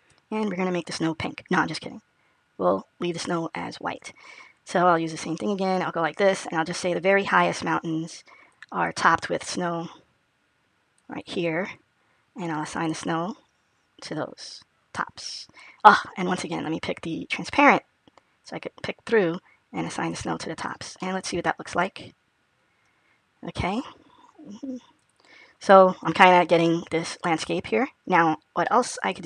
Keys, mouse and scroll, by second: 5.4 click, 6.8 click, 9.5 click, 14.3 click, 16.5 click, 17.4 click, 20.5 click, 20.9 middle click, 24.9 click, 25.4-25.8 scroll up 1, 27.5 scroll down 1, 28.5 middle click.